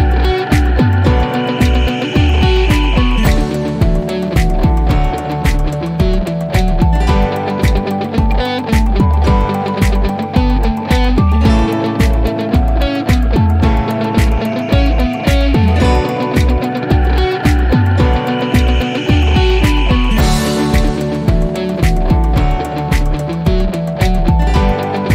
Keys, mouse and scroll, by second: 6.6 click, 8.6 click, 13.9 click, 17.8 click, 21.5 click, 24.8 click.